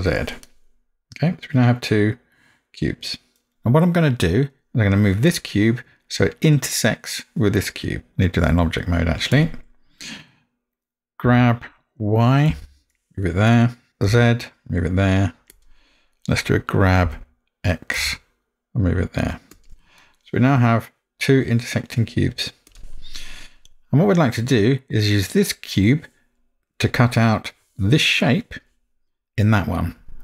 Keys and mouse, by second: 0.5-3.5 middle drag, 8.6 Tab, 11.4 g, 17.1 g, 20.0-22.3 middle drag, 26.8-27.4 middle drag.